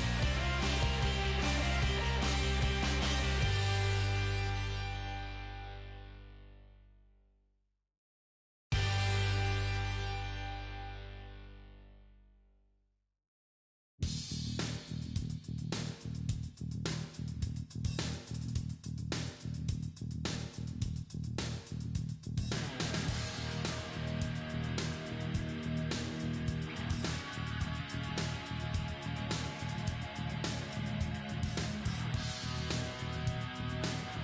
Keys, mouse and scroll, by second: 1.8 Tab, 2.6 right click, 4.2 g, 5.1 g, 5.8 middle click, 7.1-8.9 middle drag, 9.3-14.1 middle drag, 11.7 g, 12.9-14.1 right drag, 14.2 g, 17.0-21.1 middle drag, 17.8 z, 18.7 z, 21.1 g, 22.6-24.1 middle drag, 23.4-25.6 right drag, 23.9 g, 26.1 right click, 26.6 middle click, 26.9 g, 28.1 middle click, 29.2 g, 30.1 g, 30.4 middle click, 30.6-31.9 right drag.